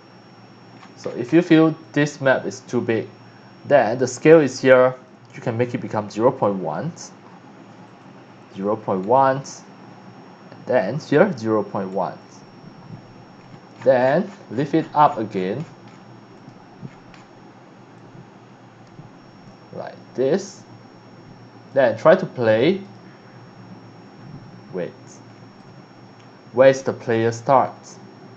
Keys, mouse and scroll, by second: 0.0 Escape, 0.7-1.4 scroll down 3, 1.9 click, 4.9 click, 6.1 KP_0, 6.2 KP_Decimal, 6.6 KP_1, 6.8 KP_Enter, 7.8 click, 8.7 KP_0, 8.9 KP_Decimal, 9.0 KP_1, 9.4 KP_Enter, 10.7 click, 11.4 KP_0, 11.9 KP_1, 12.2 KP_Enter, 13.4-16.0 scroll down 10, 16.3 click, 17.1 scroll down 1, 17.9-21.7 drag, 22.8 click, 24.4 Escape, 25.3 scroll down 1, 25.6-28.3 right drag.